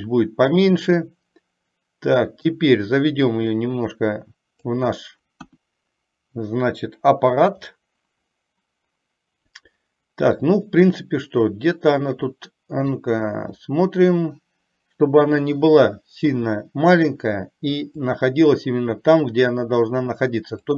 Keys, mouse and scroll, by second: 0.1-2.6 middle drag, 3.5-4.9 drag, 5.7 KP_1, 7.7-13.2 middle drag, 7.7 scroll up 1, 13.7-17.1 middle drag, 18.2-20.7 drag.